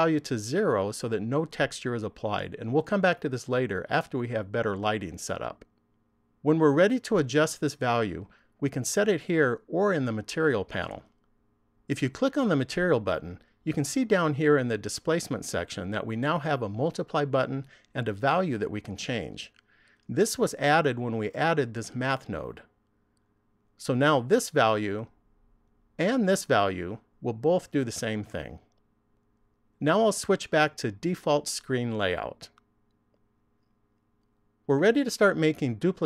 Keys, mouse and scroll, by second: 33.8 click.